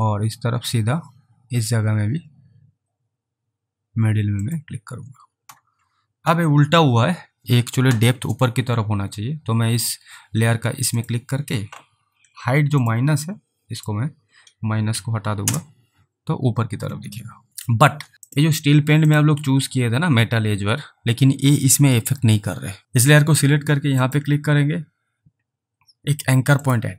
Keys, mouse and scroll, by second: 4.5 click, 11.0 click, 12.7 click, 14.9 Delete, 15.5 Return, 18.3 click, 22.8 click, 26.7 click.